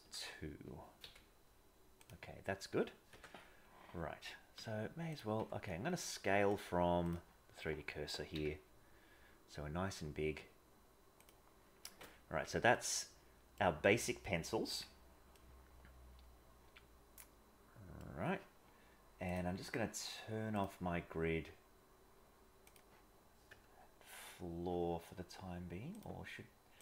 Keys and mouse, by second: 0.0 a, 1.0 g, 3.1 KP_0, 4.6 s, 5.3 Tab, 6.5-7.1 drag, 7.6 Tab, 8.3 s, 11.9 Tab, 12.7 middle click, 14.6 KP_1, 15.3-17.9 middle drag, 19.2-22.9 drag, 23.4 KP_0, 26.0-26.8 drag.